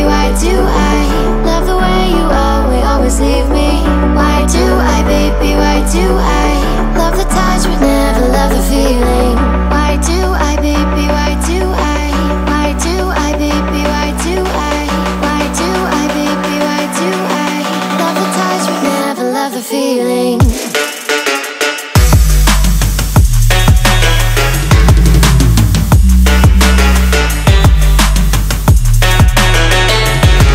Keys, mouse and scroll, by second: 18.8 shift+d, 22.5 l.